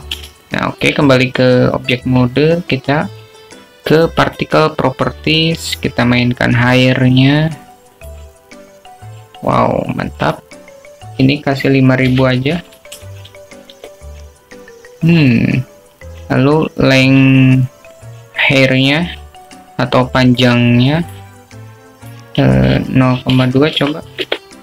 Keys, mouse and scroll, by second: 1.0 Tab, 2.6 alt+shift+click, 6.4 click, 8.8 click, 10.2 click, 12.5-16.3 drag, 14.9 0, 22.8 click, 23.1 click, 24.1-24.6 drag.